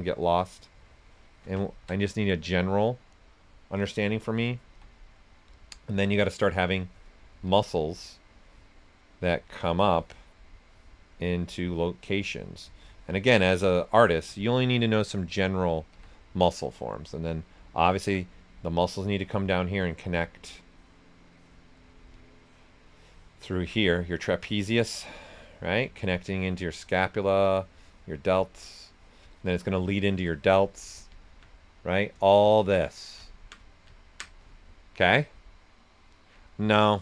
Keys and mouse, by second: 2.2 right click, 4.6 s, 4.7 click, 5.9 s, 5.9 click, 7.4 s, 7.5 click, 7.8 right click, 8.4-12.2 drag, 12.7-14.4 shift+drag, 14.4 right click, 15.9 s, 16.0 click, 16.5 right click, 17.9 alt+right click, 18.7-20.7 drag, 21.8 right click, 22.4 click, 29.3-30.8 shift+drag, 30.8 right click, 31.1 alt+right click, 33.2 ctrl+alt+right click.